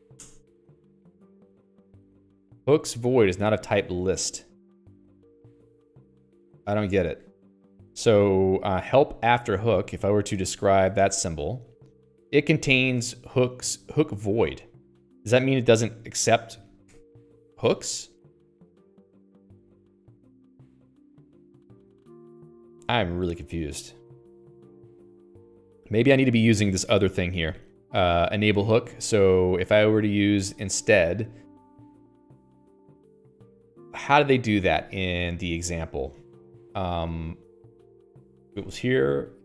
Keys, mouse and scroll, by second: 0.6 Return, 7.1 1, 7.8 Escape, 8.4 l, 10.0 alt+x, 11.3 ctrl+j, 14.2 click, 17.3 q, 18.6 Escape, 19.1 ctrl+s, 19.4 Escape, 19.6 Escape, 29.2 Escape, 29.8 Escape, 29.9 Escape, 30.4 h, 30.7 a, 33.4 a.